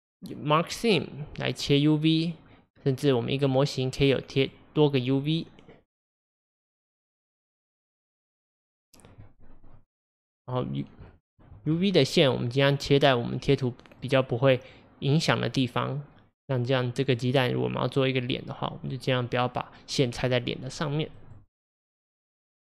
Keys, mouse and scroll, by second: 3.3-9.8 drag, 9.8-22.7 middle drag.